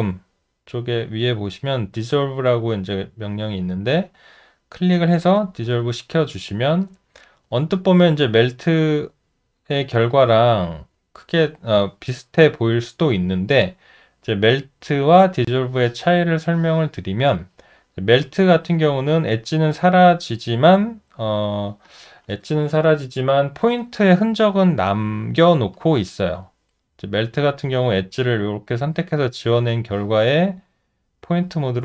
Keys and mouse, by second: 6.3 alt+middle click, 6.9 alt+right click, 7.6 alt+middle click, 13.5 alt+middle click, 27.1 alt+middle click, 27.6 alt+right click.